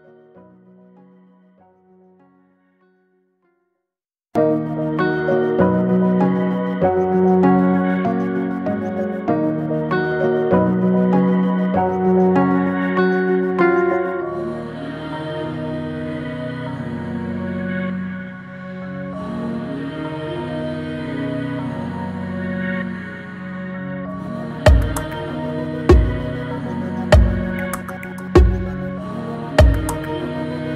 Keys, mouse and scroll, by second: 0.6 click, 1.2 shift+a, 3.4 alt+middle click, 4.3 g, 6.7-7.1 middle drag, 7.1-7.5 scroll down 1, 7.5-8.1 middle drag, 8.1 g, 9.3 click, 10.3 g, 11.7 click, 12.4 g, 14.2 scroll up 1, 14.3-15.6 middle drag, 15.6 Tab, 15.8 click, 16.8 g, 18.3 click, 18.8-20.8 middle drag, 20.8 g, 22.2-23.9 middle drag, 23.9 Tab, 24.7 s, 26.2-28.1 middle drag, 28.3 click.